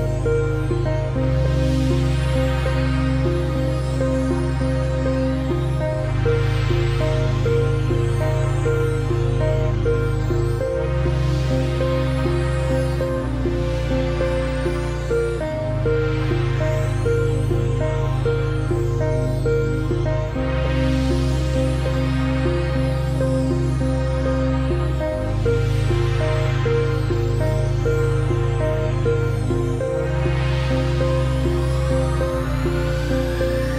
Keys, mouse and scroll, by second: 4.3 click, 6.3-6.9 alt+scroll down 1, 6.9 click, 9.9 ctrl+a, 10.6 click, 12.6 ctrl+d, 13.2 click, 15.8 shift+Left, 16.8 ctrl+s, 17.2 ctrl+Tab, 21.6 click, 32.4 click.